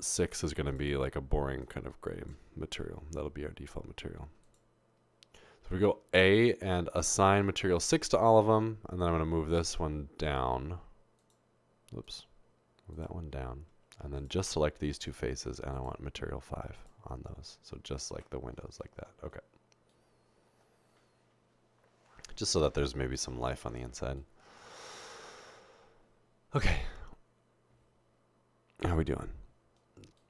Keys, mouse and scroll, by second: 0.7 click, 1.6 click, 5.8 a, 6.9 click, 7.7 click, 9.1 click, 11.2 click, 12.1 click, 12.9 click, 15.7 click, 16.8 click, 18.2 Tab.